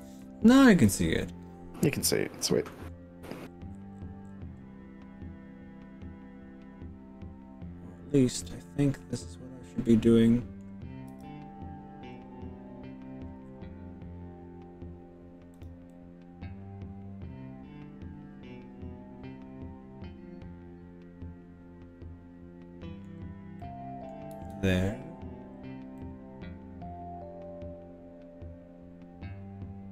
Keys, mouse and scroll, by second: 0.1 ctrl+z, 0.9 click, 1.9 g, 2.5-3.4 scroll up 5, 3.5-4.9 scroll down 8, 8.3 click, 8.7-10.7 middle drag, 11.1 g, 12.1-12.5 scroll down 3, 13.3-13.7 scroll down 3, 14.3 scroll up 2, 14.9-15.5 scroll up 2, 15.5 drag, 15.9-23.1 middle drag, 15.9 scroll up 1, 23.6 middle click, 24.3 z, 25.3-25.9 scroll down 3, 26.0-29.9 middle drag.